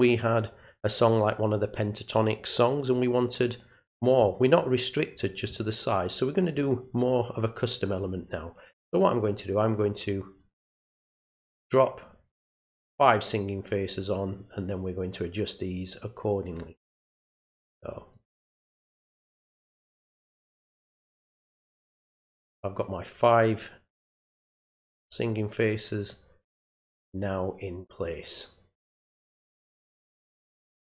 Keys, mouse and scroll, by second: 12.4-14.0 drag, 16.5-18.1 drag, 19.7-21.5 drag, 22.6-24.2 drag, 26.1-28.0 drag.